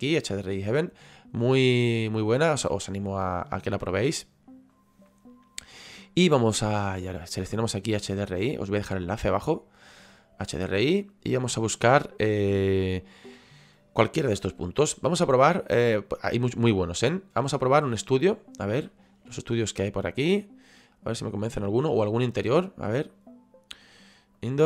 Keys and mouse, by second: 9.6 click, 18.0 click, 22.6 click, 24.4 click.